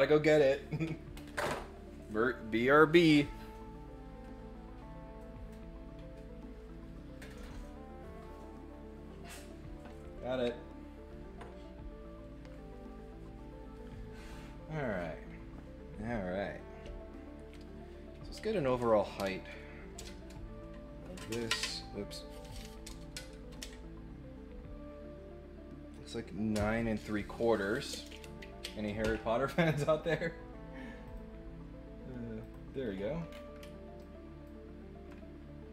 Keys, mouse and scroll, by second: 31.0 click, 32.4 click, 32.8 scroll up 2, 33.2 scroll down 2, 33.9 ctrl+click.